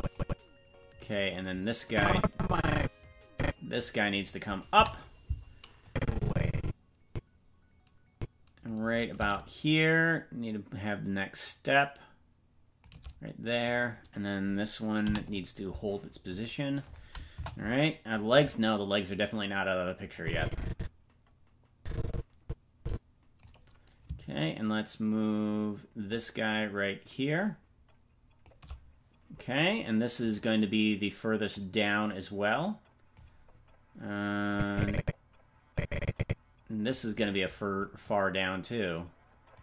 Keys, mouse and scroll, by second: 1.1 right click, 1.8-3.8 drag, 4.7 i, 5.8-8.7 drag, 9.6-12.8 shift+drag, 13.7 right click, 15.0 i, 17.3 KP_0, 20.1-23.4 drag, 26.0-28.5 shift+drag, 30.3 right click, 31.5-33.2 drag, 34.5-36.8 drag, 38.0-39.6 drag.